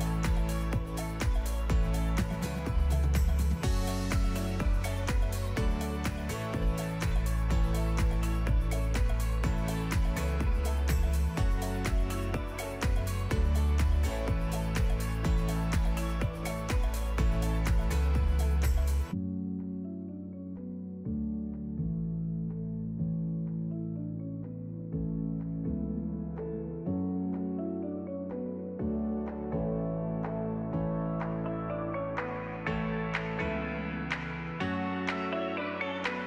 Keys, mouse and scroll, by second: 0.0 click, 0.5-2.2 drag, 2.5 click, 3.3 click, 3.7 click, 4.5 Tab, 4.7 middle click, 4.8 scroll up 3, 4.8 shift+middle click, 5.0 middle click, 5.2 Tab, 5.4 Tab, 5.7 a, 5.8 m, 6.0 Tab, 6.3 click, 7.6 drag, 7.9-8.4 drag, 8.6 Tab, 8.8 2, 8.8 alt+click, 9.0 alt+click, 9.2 alt+click, 10.4 a, 10.7 click, 10.9 s, 11.4 Tab, 12.0 shift+click, 12.8 shift+click, 13.8 click, 14.1 click, 14.6 middle click, 15.2 KP_Divide, 15.4-17.5 typing, 15.6 scroll up 7, 15.7 shift+middle click, 15.9 Tab, 16.2 alt+s, 16.7 middle click, 17.7 alt+s, 18.7 s, 19.6 s, 20.3 Tab, 20.4 middle click, 20.5-20.8 scroll down 1, 20.8 shift+a, 22.4-22.9 drag, 23.1 click, 23.7 right click, 23.9-26.0 typing, 25.0 alt+d, 25.2 alt+d, 25.4 alt+d, 25.8 alt+d, 26.2 alt+d, 26.5 middle drag, 26.9 click, 27.1 z, 27.3 click, 27.6 middle click, 28.4 scroll down 5, 28.5 scroll up 4, 28.6 click, 28.7 alt+d, 28.9 click, 28.9 alt+d, 29.1 ctrl+z, 29.2 click, 29.4 alt+d, 29.8 s, 30.1-30.4 scroll down 3, 30.4 KP_0, 30.6 scroll up 2, 30.6 z, 31.4 scroll up 1, 31.6 z, 32.0 click, 32.4 scroll down 3, 32.6 shift+s, 32.7 shift+s, 32.9 shift+a, 34.4 click, 35.1 click, 36.0 click.